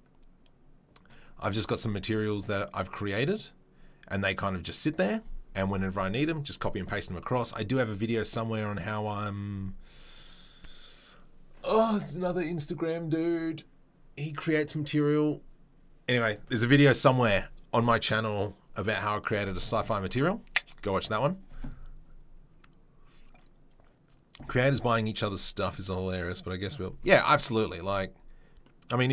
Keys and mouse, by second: 1.6 click, 1.7-29.1 middle drag.